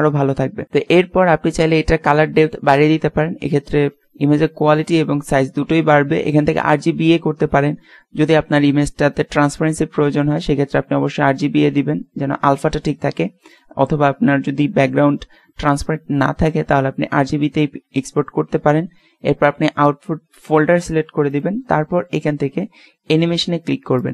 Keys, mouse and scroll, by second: 0.0-0.8 drag, 2.4 click, 6.6-8.2 drag, 13.4 click, 21.3-23.3 drag, 23.9 click.